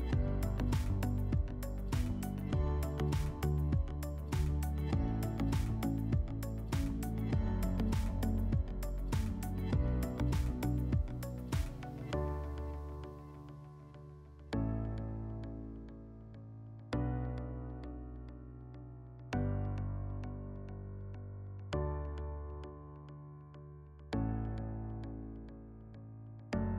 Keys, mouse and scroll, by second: 1.4 alt+middle click, 1.8 alt+scroll, 8.4 click, 9.7 click, 10.2 click, 10.6 click, 11.1 click, 12.4 scroll, 12.8 F4, 13.5 click, 14.4 middle click, 19.3 click, 20.1 click, 21.3 click, 21.8 click, 22.2 click, 22.6 f, 23.3 middle click, 23.8 scroll, 24.1 click, 25.1 shift+click, 26.0 shift+click.